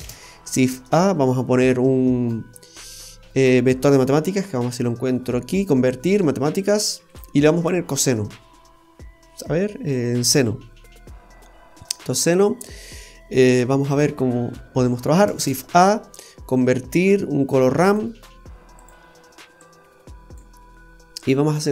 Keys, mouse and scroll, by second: 0.0 shift+a, 7.5 click, 15.4 shift+a, 18.8 typing, 19.6 click, 20.6 scroll up 1, 20.7 scroll down 1.